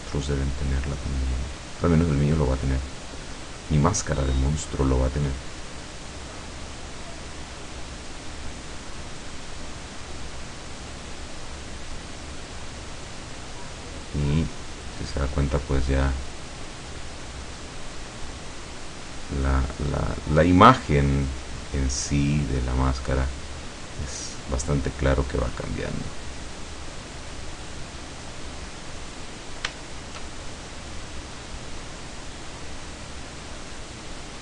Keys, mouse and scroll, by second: 0.4-3.8 drag, 4.0-7.6 drag, 7.8-9.0 drag, 11.2 click, 14.8-15.1 scroll down 1, 15.3-16.5 middle drag, 16.6 scroll up 1, 17.5 click, 18.4-19.9 drag, 20.4 click, 21.5 click, 22.1 click, 22.8 click, 23.3 click, 24.0 click, 25.3 click, 25.8-26.8 drag, 27.0-28.6 drag, 28.8 scroll down 2, 29.9 shift+scroll down 2, 31.2-32.5 drag, 33.2-34.4 drag.